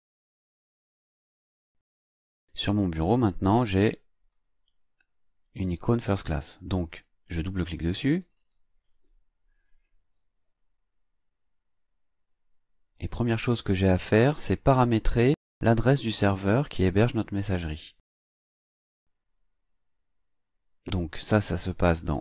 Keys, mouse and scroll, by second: 1.0 click, 3.2-4.5 drag, 8.2 click, 13.3-14.3 drag.